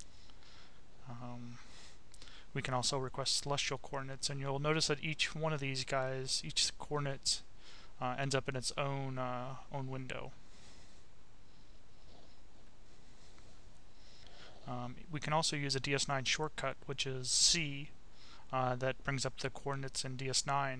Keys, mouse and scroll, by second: 1.9 click, 3.9-5.5 drag, 5.6 click, 6.3 click, 10.0 click, 11.0 click, 12.0 click, 14.0 c, 15.6 click, 17.0 click, 18.2 click.